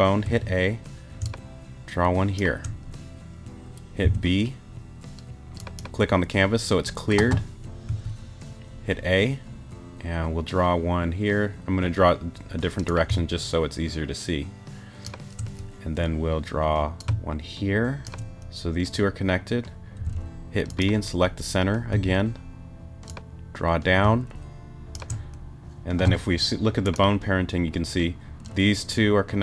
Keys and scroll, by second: 0.2 a, 1.2 shift+a, 4.0 b, 7.9 a, 20.0 b, 21.9 a.